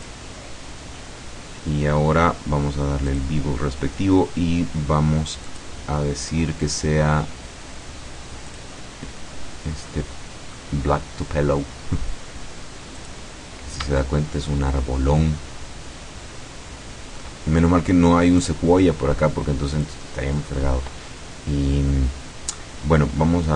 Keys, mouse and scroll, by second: 0.0 click, 1.0-1.5 scroll down 2, 2.0 scroll up 1, 3.2 click, 4.2-4.8 scroll down 1, 4.8 middle click, 5.5 click, 5.8-8.5 middle drag, 8.5 click, 9.6-10.1 scroll down 2, 10.2-10.9 scroll down 4, 13.1 click, 14.0-17.4 shift+middle drag, 18.4 click, 19.8 click.